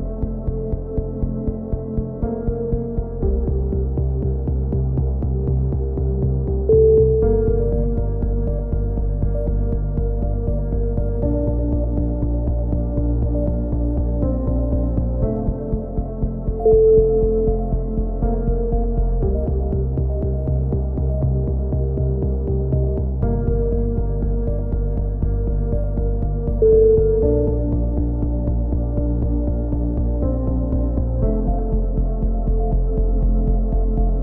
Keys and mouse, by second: 0.0 z, 2.4 right click, 2.7 click, 3.4 a, 4.6 z, 4.9 a, 5.0 a, 5.1 click, 7.4 right click, 7.9 alt+m, 8.3 a, 8.5 KP_7, 8.7 z, 12.9 z, 13.2 click, 15.1-17.5 right drag, 17.5 f, 17.5 a, 18.1 alt+m, 18.5 a, 19.6 ctrl+KP_1, 19.8 z, 23.4 z, 25.9 z, 27.1 z, 27.3 click, 28.1-29.2 right drag, 28.9 ctrl+KP_1, 29.3 click, 30.3 ctrl+z, 32.4-33.8 drag, 33.8-34.2 right drag.